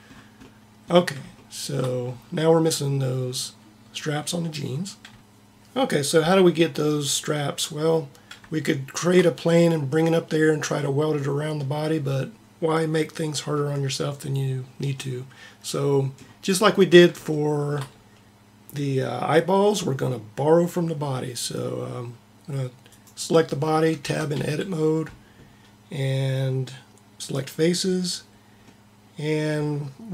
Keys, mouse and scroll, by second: 23.0-24.1 right drag, 24.1 Tab.